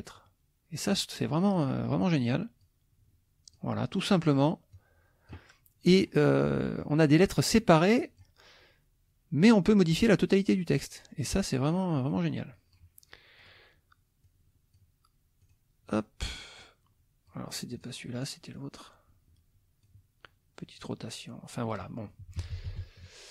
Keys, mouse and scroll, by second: 0.1 click, 1.5 click, 2.6 click, 4.7 click, 5.9 click, 6.4 middle click, 7.6 click, 9.5-10.9 drag, 11.3 click, 12.1 click, 13.4 click, 14.2 click, 15.4 click, 15.9 click, 16.6 click, 17.7 click, 18.5-20.0 drag, 20.8 click, 22.2 KP_Subtract.